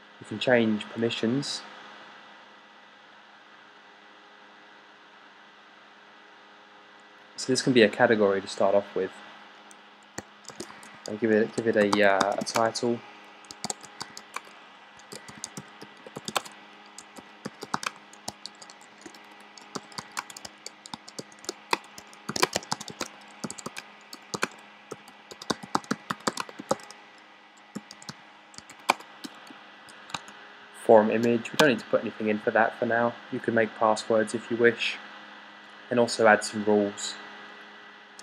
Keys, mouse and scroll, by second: 10.3-33.2 typing.